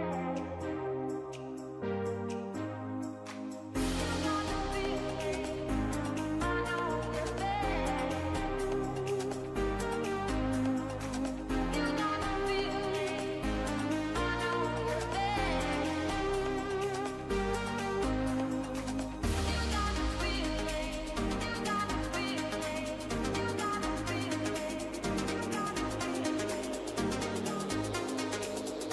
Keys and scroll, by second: 16.7 ctrl+=, 18.9 ctrl+-, 19.1 ctrl+0, 19.3 ctrl+=, 26.3 ctrl+s.